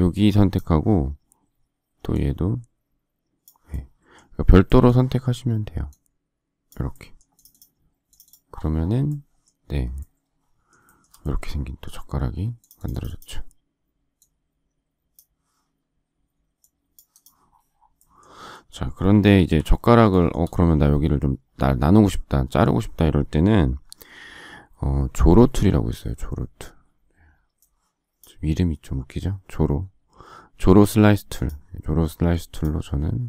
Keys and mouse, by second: 31.4 click, 31.6 click.